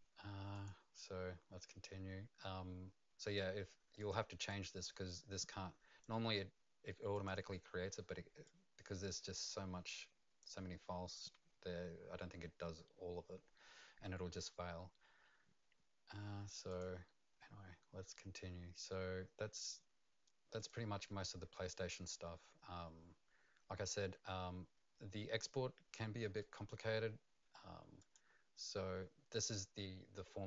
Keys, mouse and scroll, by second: 0.5 click, 1.0 click, 4.5 click, 7.1 click, 8.4 click, 16.7 click, 20.6 click, 22.9-25.9 scroll up 1, 28.0 click, 29.5 click.